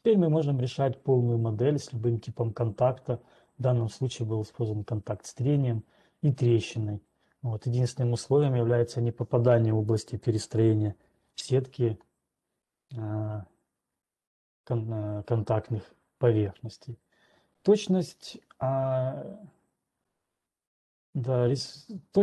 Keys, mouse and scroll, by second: 14.8-16.2 scroll down 2, 16.3 scroll down 8.